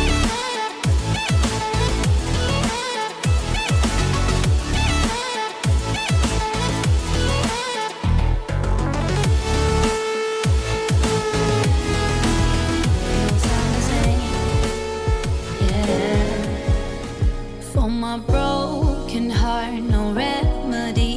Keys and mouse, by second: 1.0 r, 2.4 ctrl+z, 2.5 r, 5.0 click, 5.4 r, 7.2 r, 9.3 r, 10.5 r, 11.2 click, 13.7 a, 18.4-21.1 drag.